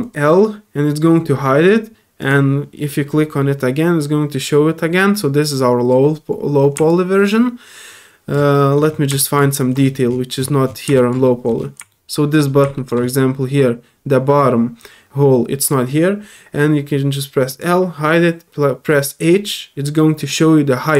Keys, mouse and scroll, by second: 0.0 click, 2.2 click, 6.9-8.3 alt+drag, 8.5 middle click, 9.2 click, 9.5 alt+middle click, 9.8 alt+scroll up 2, 10.3 middle click, 10.9 click, 11.2 middle click, 11.9 middle click, 12.7 middle click, 13.0 scroll up 1, 17.5 click, 19.2 click.